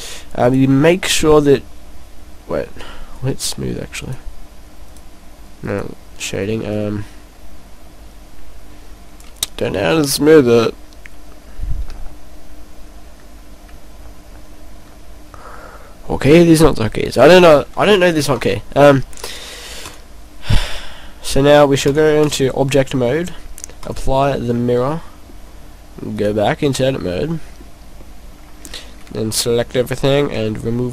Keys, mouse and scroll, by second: 0.5 click, 3.2 click, 4.9 click, 5.7 click, 6.7 click, 10.1 p, 11.9 o, 13.8 l, 14.3 i, 15.5 u, 19.3 click, 21.9 click, 23.9 click, 24.6 middle click, 25.9 middle click, 26.7 click, 27.0 middle click, 27.6-28.0 scroll up 2, 28.0 middle click, 29.1 a, 29.5 a.